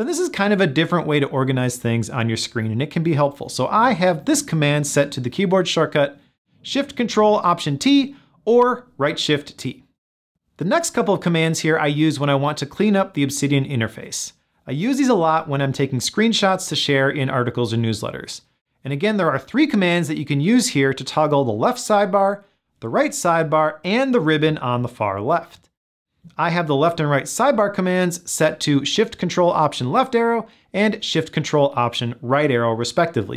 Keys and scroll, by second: 28.3 ctrl+alt+shift+Left, 31.7 ctrl+alt+shift+Right.